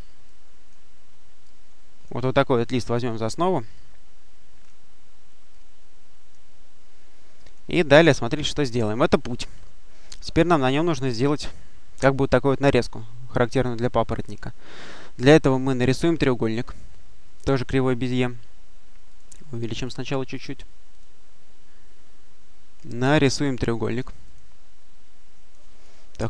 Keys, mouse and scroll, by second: 0.1 click, 1.3 click, 2.9-5.0 drag, 5.4 click, 7.3-8.3 drag, 17.5 click, 19.0 click, 19.7 click, 20.8 click, 23.1 click, 24.1 click.